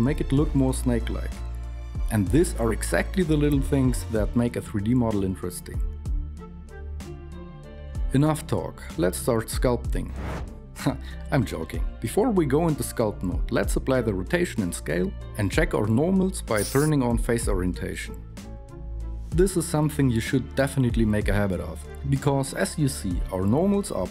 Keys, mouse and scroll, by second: 0.8 g, 2.3 Tab.